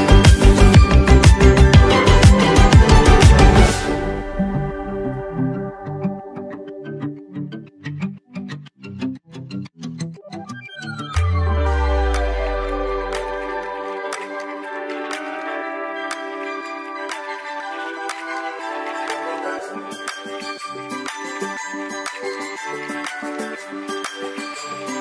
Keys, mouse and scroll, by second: 4.0-5.7 drag, 15.4 click, 17.9 click, 18.9-19.4 alt+scroll up 1, 21.8-23.1 typing, 23.5-24.9 drag, 24.9 x.